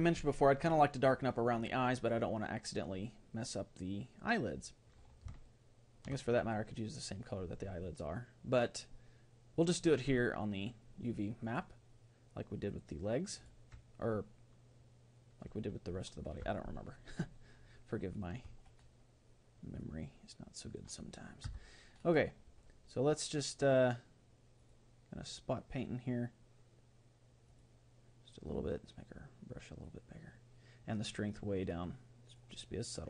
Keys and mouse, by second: 5.5-8.3 middle drag, 11.4-13.5 drag, 16.5-19.4 middle drag, 19.8-21.8 drag, 21.5 Tab, 21.9 middle click, 24.6-26.3 drag, 27.5-30.4 drag, 30.9-32.5 drag.